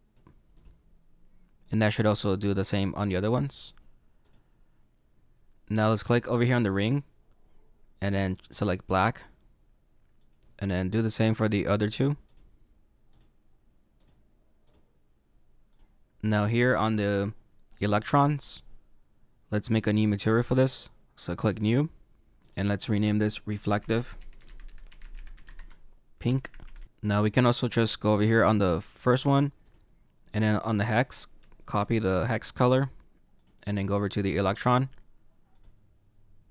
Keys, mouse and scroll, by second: 0.5 click, 4.2 click, 6.7 click, 8.1 click, 10.2 click, 12.3 click, 13.1 click, 14.7 click, 15.7 click, 18.1 click, 21.5 click, 26.8 click, 27.4 click, 35.6 click.